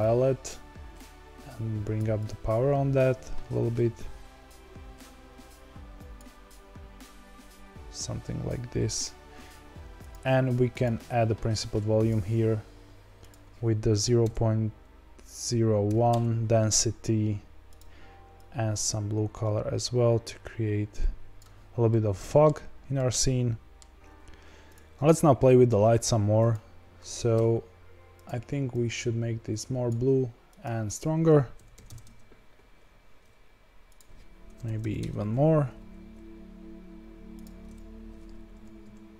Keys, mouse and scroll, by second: 12.2-16.2 drag, 18.3 click, 21.8-24.0 middle drag, 24.0 scroll up 1, 24.2 click, 24.4 ctrl+s, 26.5 click, 28.7 click, 32.0-35.6 drag, 35.6 g, 37.7 click.